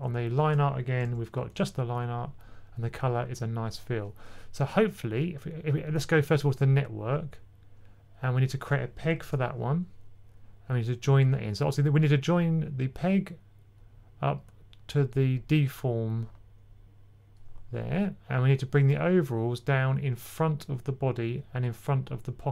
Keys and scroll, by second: 1.3-2.3 typing, 9.1 super+p.